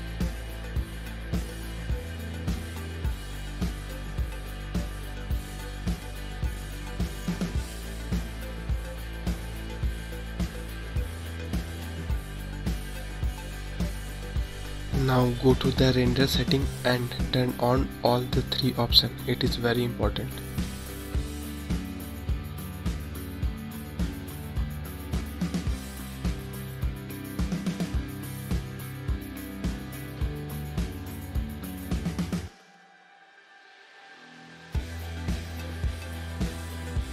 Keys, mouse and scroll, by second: 1.2 space, 2.8 space, 3.9-5.9 drag, 5.9 space, 12.8 space, 13.3 click, 14.7 click, 16.8 click, 18.1 click, 20.5 click, 23.6-27.7 drag, 29.8 click.